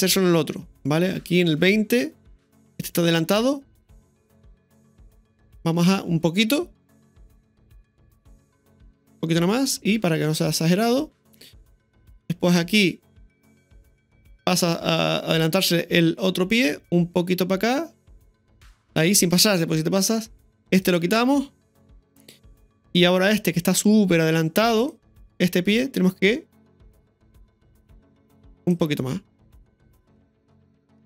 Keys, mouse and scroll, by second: 4.6-7.4 right drag, 9.7 i, 12.2-13.9 drag, 16.1 click, 17.2 r, 18.8 i, 19.8-20.8 drag, 20.4 i, 20.8 right click, 21.7 Delete, 22.5-24.9 drag, 27.1 r, 30.0 i.